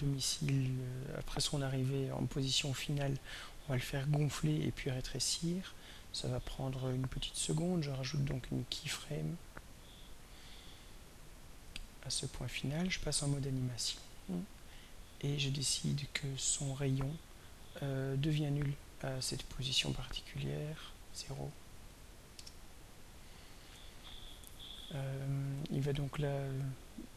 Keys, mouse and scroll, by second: 8.3 click, 9.9 click, 12.3 click, 14.7 click, 16.1 click, 19.2 click, 20.3 click, 21.8 0, 22.3 Return, 25.6-27.1 drag.